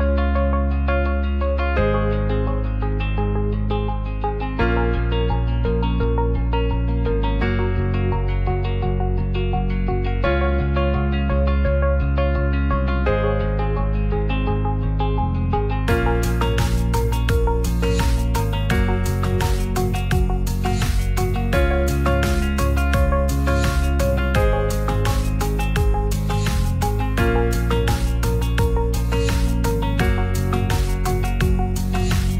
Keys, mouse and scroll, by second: 0.0 Tab, 0.6 alt+z, 1.2 click, 1.7 click, 5.3 click, 6.0-7.3 drag, 7.7 c, 8.2 shift+d, 8.3 right click, 11.5 click, 12.1 click, 14.1 Tab, 14.7 ctrl+s, 15.0 alt+z, 15.2 middle drag, 16.0 shift+middle drag, 16.6 ctrl+s, 17.4 ctrl+z, 17.4 Tab, 17.6 shift+middle click, 18.0 Tab, 19.4 click, 20.8 Tab, 21.2-21.5 middle drag, 22.0 shift+middle drag, 22.9 ctrl+s, 23.6 shift+middle click, 23.9 middle click, 24.7 click, 25.5-28.6 drag, 29.4 click, 31.3 scroll up 1, 31.4 middle click, 31.6 scroll down 1, 32.0 ctrl+a.